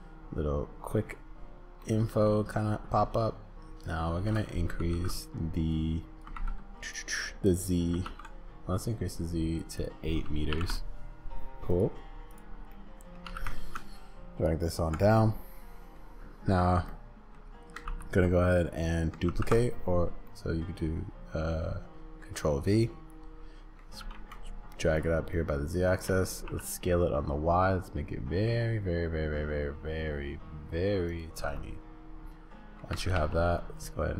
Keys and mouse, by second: 1.8 click, 3.9 click, 4.8 ctrl+z, 5.8 click, 6.3 ctrl+z, 8.0 ctrl+z, 8.9 click, 9.9-11.0 drag, 11.7 click, 12.3 click, 12.7 middle click, 13.2 g, 15.2 click, 16.9 click, 17.8 ctrl+c, 19.3 ctrl+v, 20.3 click, 24.0 g, 25.3 click, 26.1 s, 31.5 click, 32.9 g.